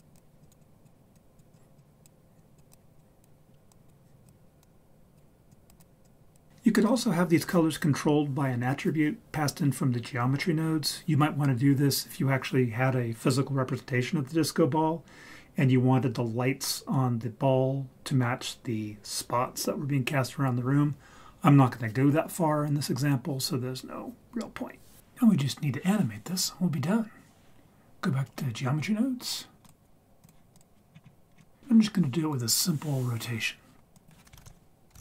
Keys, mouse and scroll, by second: 0.1 click, 1.1 click, 2.3 click, 3.7 click, 5.5 click, 6.5 click, 29.6 click, 30.6 click, 30.9-31.3 scroll down 4, 31.3 scroll up 3, 33.9 click, 34.4 shift+a.